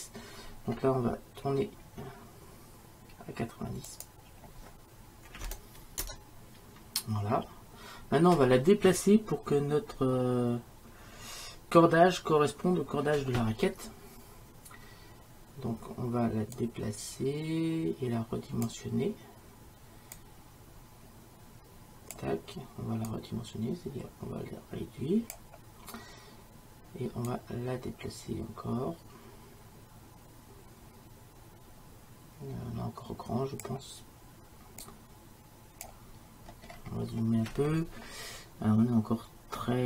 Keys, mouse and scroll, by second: 0.3-3.9 middle drag, 3.9-5.9 drag, 5.9-16.6 middle drag, 16.6-18.8 drag, 20.2-22.0 drag, 23.1-25.1 drag, 27.3-29.4 drag, 29.3 right click, 34.9 click, 35.3-36.6 drag, 36.6-39.8 middle drag.